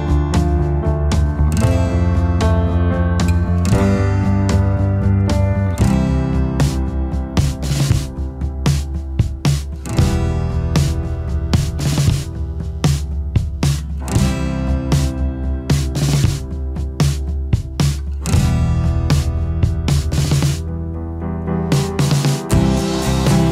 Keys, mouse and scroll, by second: 5.3 space, 7.5 space, 10.6 space, 15.4 ctrl+z, 17.7 alt+scroll down 1, 17.9 space, 19.6 alt+scroll up 1, 19.7 space, 20.8 alt+scroll up 1, 21.0 space, 22.5 alt+scroll down 1.